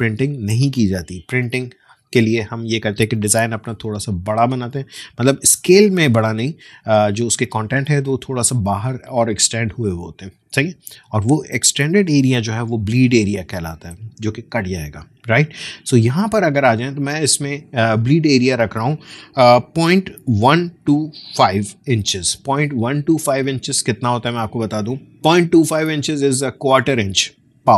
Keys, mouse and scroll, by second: 16.5-19.8 drag, 19.8-21.7 typing, 23.5 click, 23.6 click.